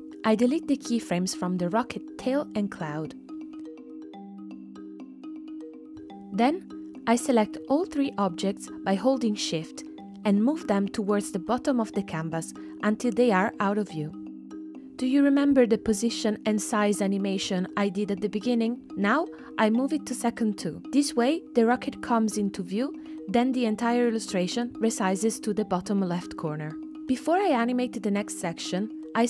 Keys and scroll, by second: 1.3 BackSpace, 4.3 BackSpace, 13.4 space, 21.4 space, 22.7 space.